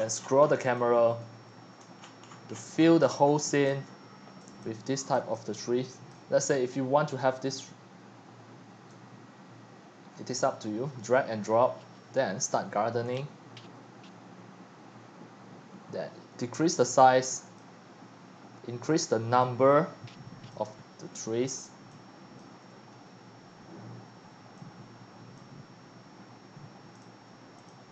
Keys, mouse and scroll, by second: 0.0-0.7 middle drag, 0.0-0.7 scroll down 37, 0.7-1.8 typing, 2.0 shift+middle click, 2.8 shift+middle click, 3.7-6.4 typing, 5.2 click, 6.2-7.6 drag, 7.6 middle click, 7.6 scroll, 7.9-27.9 drag.